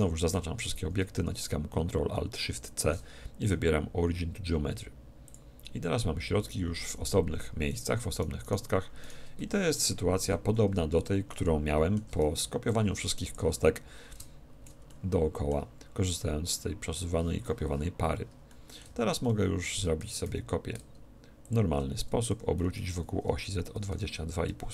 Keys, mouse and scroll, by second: 0.3 a, 6.2 a, 6.8 z, 7.3 a, 7.7-10.7 right drag, 9.3 a, 11.3-13.2 middle drag, 12.4 b, 14.1-15.8 drag, 14.9-16.8 middle drag, 18.5-21.1 middle drag, 18.9 z, 21.5-23.1 drag, 22.3 r.